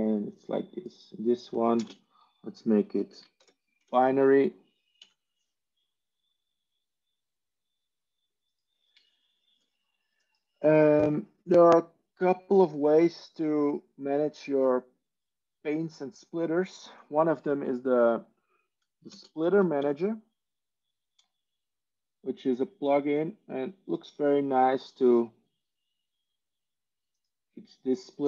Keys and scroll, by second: 1.7 ctrl+space, 3.3-3.8 typing, 4.9 ctrl+q, 18.5 ctrl+e, 19.0 ctrl+space, 19.7 ctrl+s.